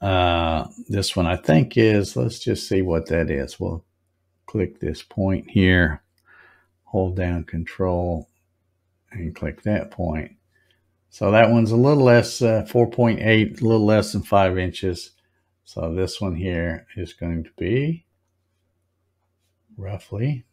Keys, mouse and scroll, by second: 0.8 scroll up 3, 1.5 scroll up 2, 4.6 click, 9.2 ctrl+click, 13.6 scroll down 2, 14.1 scroll up 1, 14.8 click, 18.1 click, 18.6-19.5 scroll down 5, 20.0-20.3 scroll up 5.